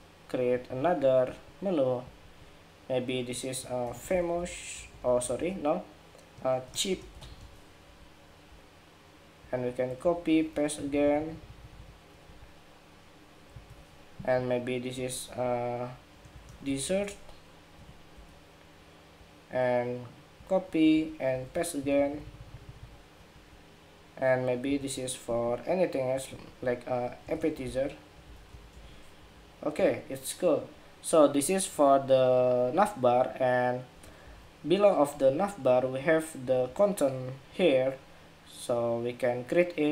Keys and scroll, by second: 0.3 alt+Right, 7.5 Escape, 9.7 super+c, 10.3 super+v, 13.2 alt+Right, 17.8 Escape, 20.6 super+c, 21.0 super+v, 24.4 alt+Right, 28.9 Escape, 34.2 super+-.